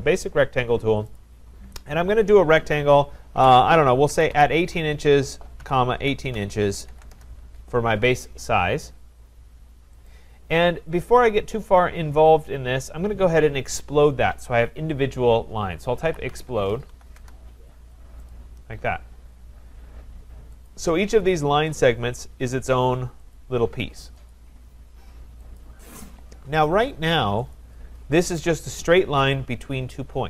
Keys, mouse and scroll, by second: 1.2 click, 3.4-7.4 typing, 10.1 click, 15.8-18.2 typing, 18.3 click, 20.7 click, 21.8 click, 22.7 click, 23.4 click, 24.3 click, 25.6 click, 27.5 click.